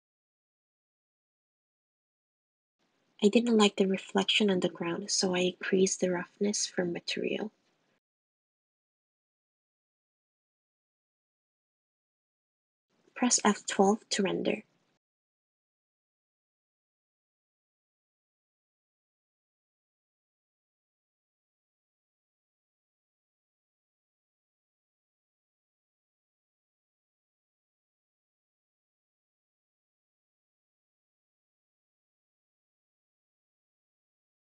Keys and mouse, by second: 0.1 r, 0.9 g, 2.6 click, 4.5 click, 8.6-9.8 drag, 10.5 click, 14.4 F12.